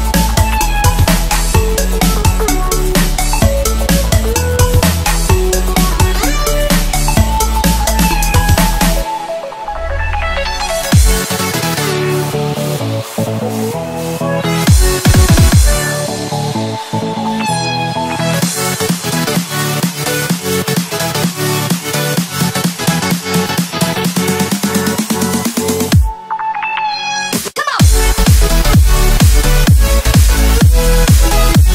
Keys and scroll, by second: 0.7 space, 1.2 super+space, 1.2 super+space, 1.3 super+space, 1.4 super+space, 1.6 super+space, 1.7 super+space, 4.6 u, 9.0 a, 9.5 space, 10.0 alt+super+space, 10.6 v, 10.9 space, 12.3 m, 13.4 v, 14.2 i, 17.0 v, 18.4-20.1 typing, 20.6 Tab.